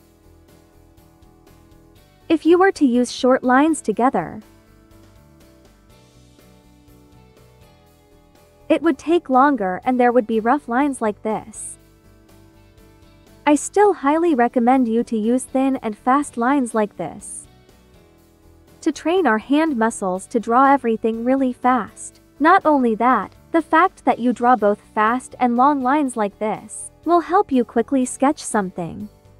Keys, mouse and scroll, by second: 4.2 click, 10.3 click, 15.2 click, 15.2-17.8 drag, 21.7 space, 21.9 click, 22.2 space, 28.9 space, 29.2 click.